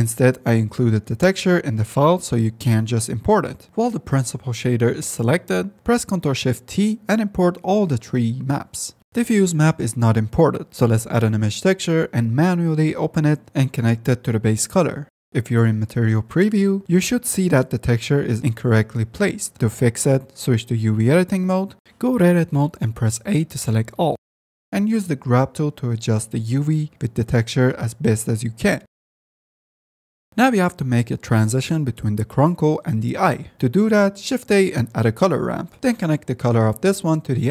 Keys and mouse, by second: 3.7 x, 4.0 click, 5.9 shift+c, 9.0 click, 9.1 z, 9.3 F10, 9.9 click, 10.7 click, 11.4 shift+a, 13.4 click, 15.6-16.4 drag, 16.8-18.3 middle drag, 20.7-22.0 middle drag, 22.2 Tab, 24.3 g, 24.7 g, 26.1 f, 26.3 drag, 26.9 click, 27.6 click, 27.8-28.4 drag, 28.5 drag, 28.7 click, 29.3 f, 29.4 click, 30.4-31.7 drag, 32.5 middle click, 32.7 middle click, 34.3 ctrl+s, 34.3 shift+a, 36.2-37.5 drag.